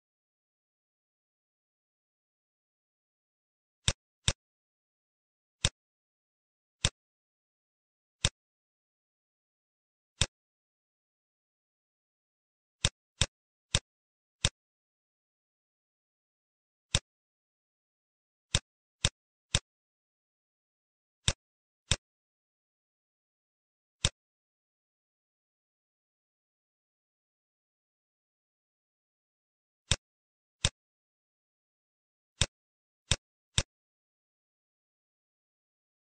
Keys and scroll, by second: 1.4 ctrl+g, 3.2 ctrl+g, 5.1 ctrl+z, 9.2 Home, 11.8 ctrl+shift+a, 20.2 space, 27.5 z, 31.2 space.